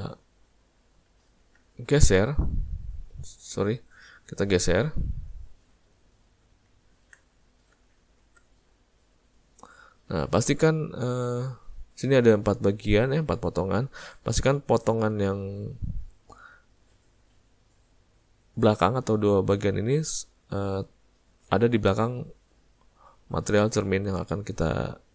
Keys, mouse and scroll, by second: 0.5 middle click, 1.2 ctrl+middle click, 2.2 click, 3.6 click, 6.2 middle click, 6.8 ctrl+middle click, 7.2 middle click, 7.8 z, 8.9 middle click, 11.5 click, 21.7 click.